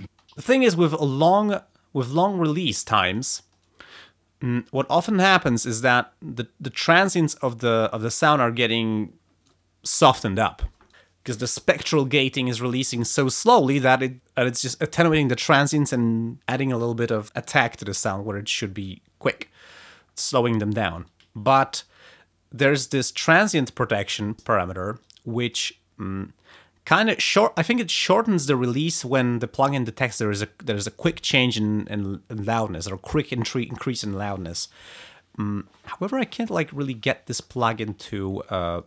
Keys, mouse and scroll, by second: 0.0 space.